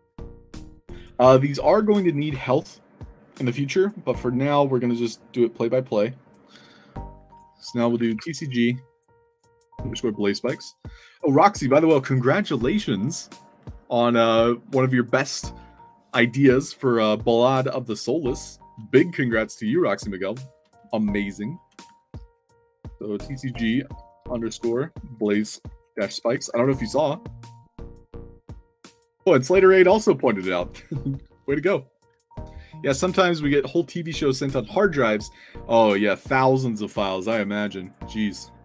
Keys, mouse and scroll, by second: 5.8 click, 7.2 click, 8.0 c, 10.5-12.0 drag, 22.6 shift+c, 24.8-27.0 typing, 37.7 click.